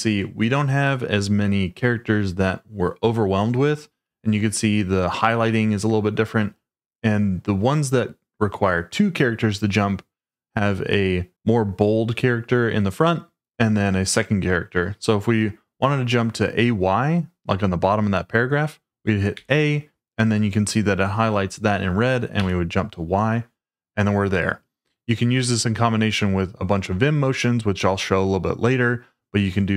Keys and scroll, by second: 19.3 a, 22.3 y.